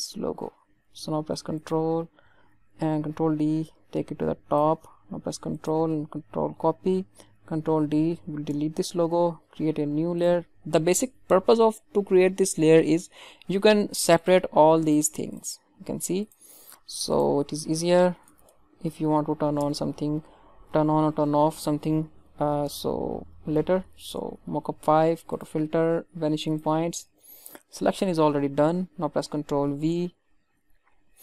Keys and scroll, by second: 2.9 ctrl+d, 5.9 ctrl+c, 7.3 ctrl+d, 8.4 Delete, 24.0 Return, 29.5 ctrl+v.